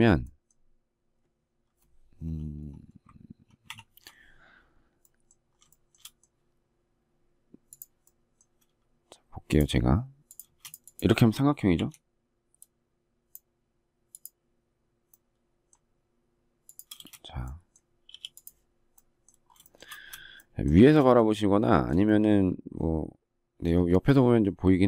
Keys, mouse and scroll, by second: 3.6 ctrl+shift+2, 5.6 shift+middle click, 10.4 space, 11.7 q, 16.9 space, 18.0 e, 19.6 shift+middle click, 20.8 space.